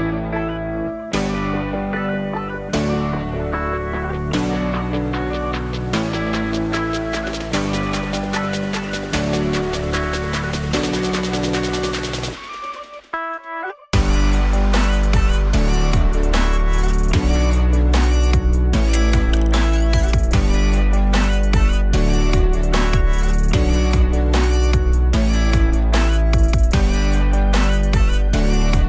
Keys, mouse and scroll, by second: 6.1 2, 6.5 click, 6.7 alt+shift+click, 7.0 alt+shift+click, 7.4 alt+shift+click, 7.8-8.1 scroll down 3, 8.1 alt+middle click, 8.8 e, 12.4 alt+middle click, 12.7 scroll, 13.4 e, 18.4 g, 19.9 s, 21.4 alt+middle click, 22.1 e.